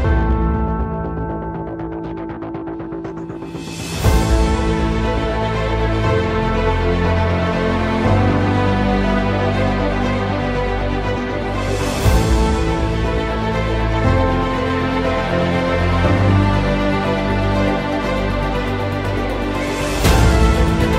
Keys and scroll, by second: 0.1 alt+c, 5.3 ctrl+z, 6.7 F10, 10.8 space, 11.2 F3, 14.4 F2, 16.1 ctrl+z, 17.6 F5.